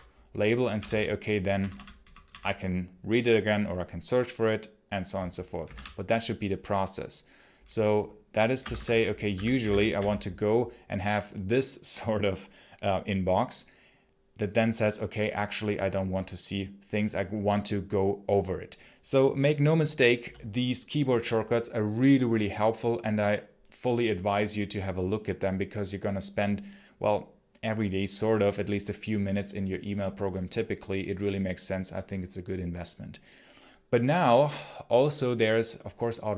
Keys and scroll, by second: 0.6 o, 1.4 p, 1.8 p, 2.1 p, 5.2-6.0 typing, 8.5-10.3 typing.